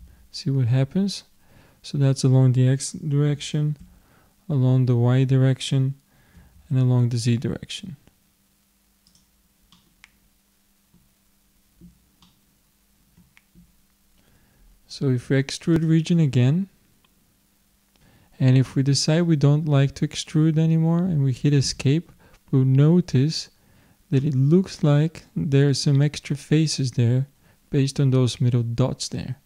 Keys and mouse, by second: 9.8 middle click, 12.2 middle click, 15.7-17.4 drag, 17.5 click, 22.5-29.4 middle drag.